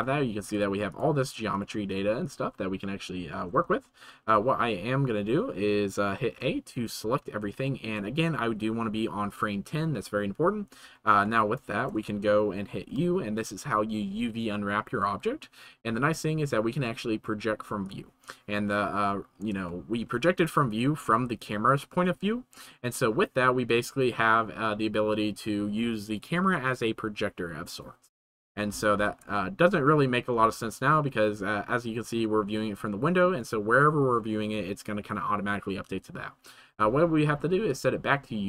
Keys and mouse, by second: 0.4 3, 0.9 middle click, 1.5 middle click, 1.9 middle click, 2.2-3.5 middle drag, 3.9 shift+middle click, 6.3 a, 7.6 shift+middle click, 11.7 shift+middle click, 12.9 u, 20.0 shift+click, 20.1 middle click, 21.8 shift+click, 23.0 middle click, 23.9 middle click, 29.0 ctrl+s, 29.3 middle click, 29.9 middle click, 30.9 Tab, 32.2-33.2 middle drag, 37.7 right click, 38.0 right click.